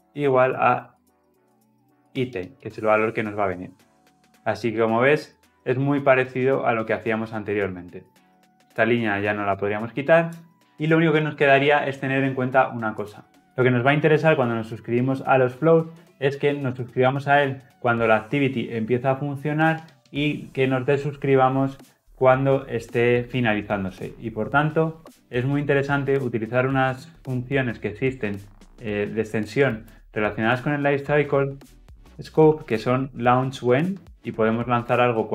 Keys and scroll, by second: 1.4 Escape, 2.6 Escape, 2.6 ctrl+alt+l, 5.3 ctrl+alt+o.